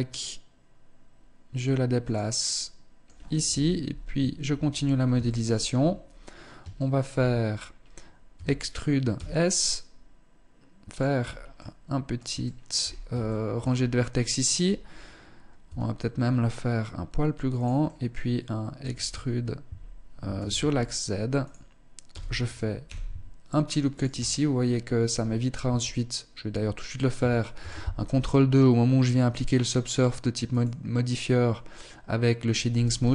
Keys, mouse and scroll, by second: 1.8 middle click, 2.9 KP_1, 3.6 Tab, 4.2-4.6 scroll up 3, 4.8 shift+middle click, 5.6-6.0 scroll down 2, 6.2 shift+middle click, 7.1 scroll up 1, 7.8 e, 10.6-11.0 scroll up 2, 11.0 middle click, 11.8 shift+middle click, 12.3-12.7 scroll up 2, 12.7 shift+middle click, 15.1 s, 17.2 click, 17.4 middle click, 18.4 e, 21.5 e, 23.7-24.7 scroll down 7, 24.5-24.9 scroll up 3, 25.1 Tab, 27.0 ctrl+2, 29.9 click, 32.4 t, 32.8-33.1 scroll up 2.